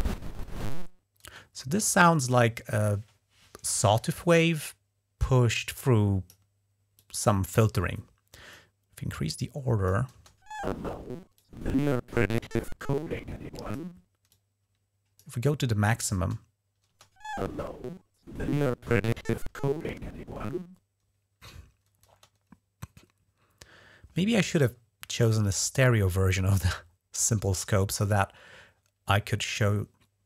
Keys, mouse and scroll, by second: 1.1 space, 5.6 click, 6.8 click, 8.4-9.7 drag, 10.0 space, 11.2-13.6 drag, 14.1-15.1 drag, 16.0 space, 16.7 space, 21.9 space.